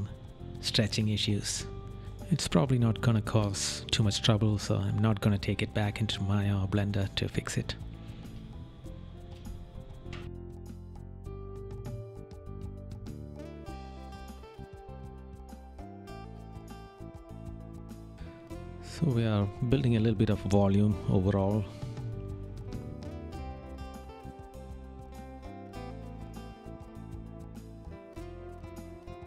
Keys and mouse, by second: 7.7 right click, 9.3 right click, 10.1 right click, 11.2 right click, 11.9 right click, 12.8 right click, 13.9 right click, 14.7 right click, 15.3 right click, 17.4 right click, 20.5 right click, 21.1 right click, 22.8 right click.